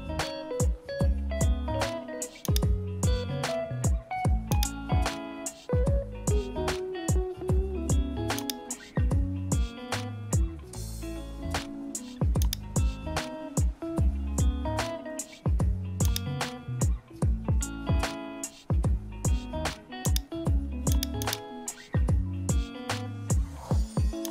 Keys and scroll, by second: 1.2 super+-, 13.0 super++, 21.8 super+-, 22.2 super++, 23.1 super++.